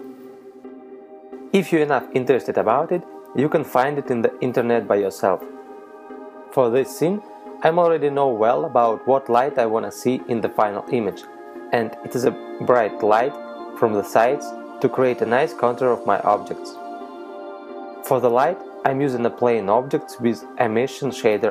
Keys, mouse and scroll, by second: 9.6 middle click, 10.8 shift+s, 12.9 shift+a, 14.7-15.3 scroll up 4, 16.0 click, 19.0 r.